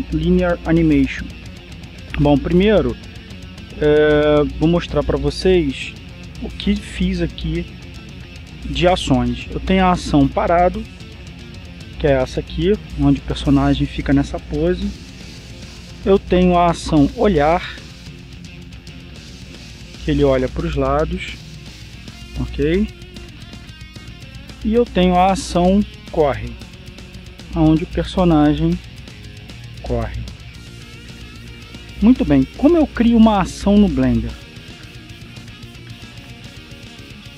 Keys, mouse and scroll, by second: 4.8 click, 6.9 click, 8.1 click, 11.4 click, 12.8-14.2 drag, 17.1 click, 18.1 click, 19.3-25.7 drag, 26.0 click, 27.0 click, 28.4-33.7 drag.